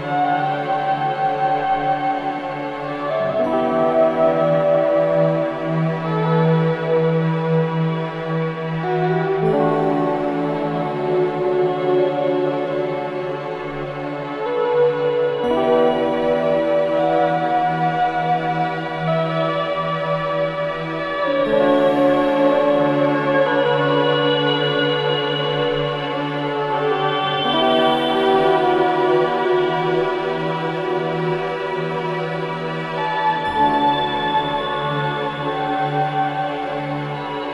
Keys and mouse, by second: 0.2 click, 0.5 typing, 0.9 click, 2.0-2.8 typing, 2.4-3.3 drag, 5.3-6.4 typing, 5.6-6.6 drag, 7.4-11.0 typing, 8.0 click, 12.7-13.7 drag, 13.1 typing, 14.9-16.4 typing, 16.5-19.4 ctrl+alt+drag, 18.8 space, 22.6 space, 23.6 ctrl+alt+click, 25.0 click, 25.7 ctrl+alt+click, 26.2 click, 27.8-31.0 drag, 31.4 click, 33.2-33.7 ctrl+alt+drag, 34.5 ctrl+alt+click, 37.0 alt+click.